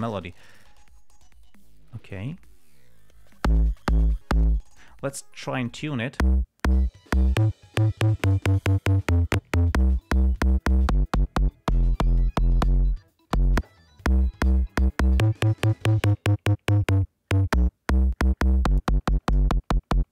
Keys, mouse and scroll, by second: 0.4 click, 6.0 click.